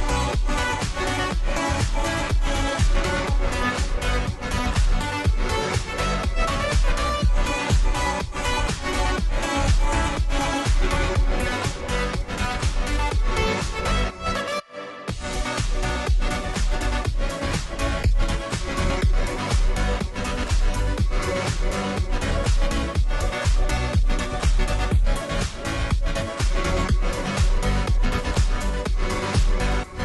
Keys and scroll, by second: 7.4-8.7 space, 20.7 ], 21.5 ], 23.1 1.